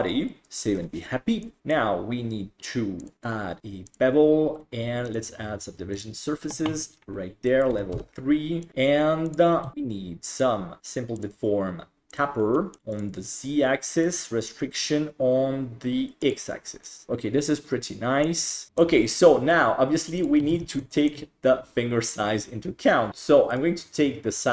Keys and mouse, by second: 0.4 ctrl+s, 1.4 middle click, 3.0 click, 3.2-3.9 drag, 5.2 click, 7.5 click, 8.7 click, 9.3 click, 9.7 ctrl+s, 10.3 click, 12.1 click, 12.5 middle drag, 12.9 click, 14.0 click, 16.2 click, 16.8-18.4 middle drag, 18.7 middle drag, 20.5 alt+z, 20.9 shift+middle drag, 23.6 right click, 24.4-24.5 middle drag.